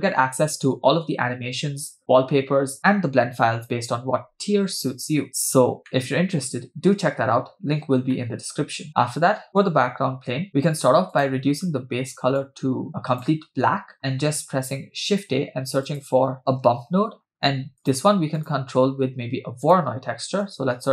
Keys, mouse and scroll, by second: 5.9-7.2 middle drag, 8.1 middle click, 10.5 middle click, 11.1 click, 14.0 middle click, 15.0 shift+a, 19.0 shift+a.